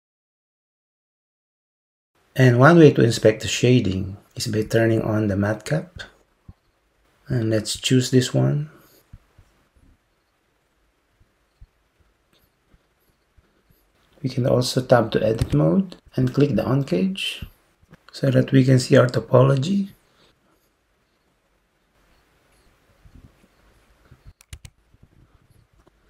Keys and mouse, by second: 6.0-9.5 drag, 15.5 Tab, 17.5 click, 24.6 Tab.